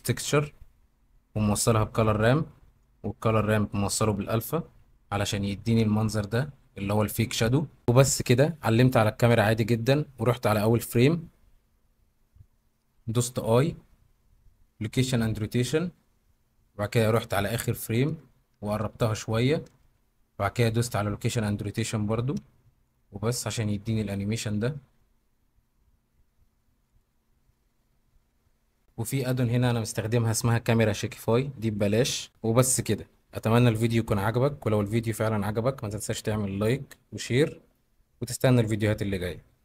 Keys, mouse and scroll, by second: 1.3 middle click, 2.8 middle click, 5.7 KP_0, 13.5 i, 17.2 middle click, 18.7 g, 19.4 Escape, 20.6 i, 22.9 click, 23.7 click, 26.9 click.